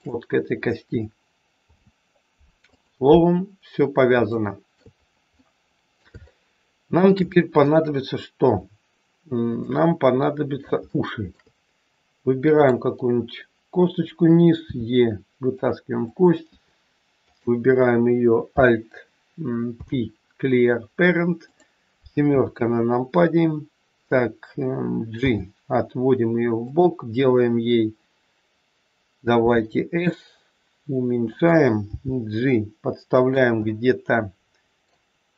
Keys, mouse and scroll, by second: 1.6 ctrl+p, 4.2 shift+middle click, 5.0-5.3 scroll down 1, 5.3 middle click, 6.0 shift+scroll up 1, 6.2 middle click, 7.3 middle click, 9.5 middle click, 10.7 shift+middle click, 11.0 shift+middle click, 12.5 click, 14.6 e, 16.0 click, 17.1 click, 19.7 alt+p, 22.2 KP_7, 25.1 g, 29.3 s, 31.9 g, 33.6 middle click.